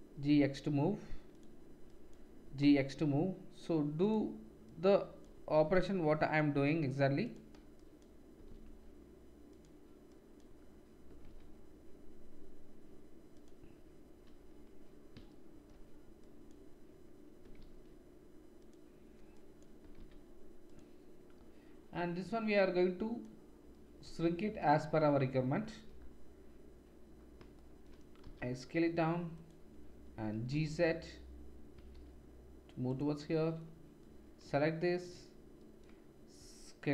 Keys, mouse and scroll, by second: 0.1 g, 1.4 middle click, 1.9-4.1 drag, 2.4 g, 4.1 middle click, 4.7-7.3 drag, 5.5 g, 7.3 middle click, 7.7-9.6 drag, 8.3 g, 9.6 middle click, 10.1-13.4 drag, 11.1 g, 13.4-16.2 middle drag, 16.2-18.8 drag, 17.4 g, 18.8 middle click, 19.4-20.8 drag, 19.8 g, 20.8-22.6 middle drag, 22.6-29.4 drag, 28.2 s, 29.4 middle click, 30.3-36.9 drag, 30.3-34.0 right drag, 30.3 g, 36.3 z.